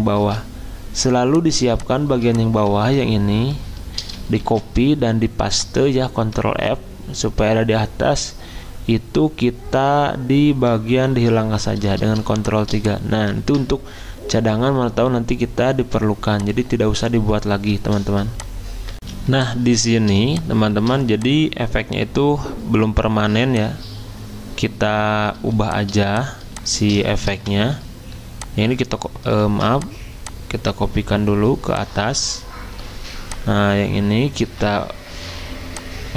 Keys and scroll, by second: 4.0 ctrl+c, 4.4 ctrl+f, 6.5 ctrl+z, 11.1 ctrl+3, 13.4 ctrl+z, 19.1 z, 29.4 ctrl+z, 29.4 v.